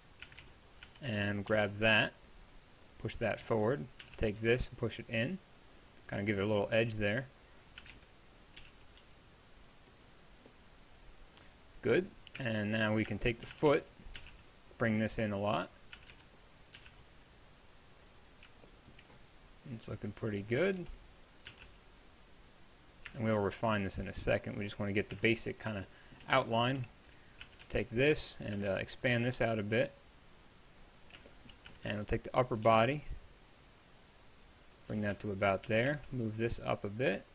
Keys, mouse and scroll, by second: 0.0-1.5 typing, 3.3 a, 3.4 b, 6.5 middle click, 7.8 a, 7.9 b, 8.6 g, 12.4 KP_1, 13.5 a, 13.7 b, 14.2 g, 16.0 a, 16.1 b, 16.8 g, 20.6 a, 20.8 b, 21.5 g, 23.1 Tab, 25.1 KP_1, 26.8 Tab, 27.5-29.2 typing, 31.7 a, 31.9 b, 34.8 g, 34.9 a, 35.1 b, 35.7 g.